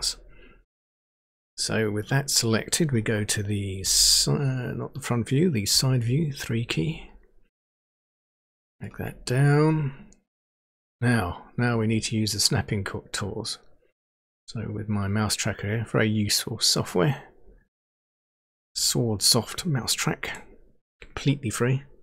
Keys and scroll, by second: 3.8 End, 5.7 Page_Down.